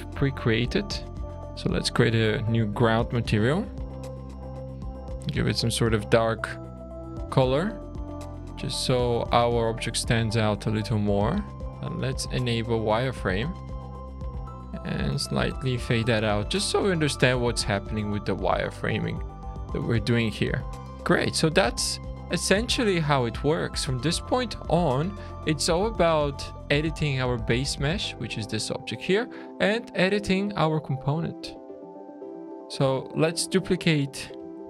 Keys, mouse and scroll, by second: 1.2 click, 1.2 scroll down 1, 1.5 click, 2.2 click, 4.9 click, 8.5-11.6 scroll up 5, 11.6 click, 11.6-12.6 scroll down 10, 16.4-17.0 scroll up 5, 17.1-17.7 scroll down 4, 17.7 middle click, 18.9 middle click, 19.5-19.9 scroll down 3, 19.9 middle click, 20.6-21.1 scroll down 2, 21.1-21.8 scroll up 3, 21.8 middle click, 22.1-22.8 scroll down 1, 24.2 click, 25.3 shift+click, 25.6 scroll down 2, 26.9-28.0 scroll up 3, 31.2 click, 31.6 alt+a, 31.9 click, 32.3-32.8 scroll down 3, 32.9 shift+middle click.